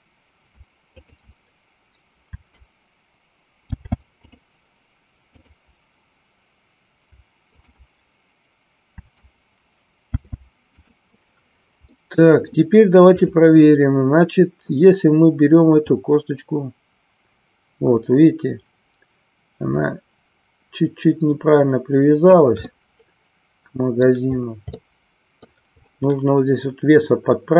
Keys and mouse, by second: 10.0 ctrl+shift+c, 12.1 middle click, 13.2-14.3 drag, 15.8-22.5 drag, 22.8-24.2 middle drag, 24.8 middle click.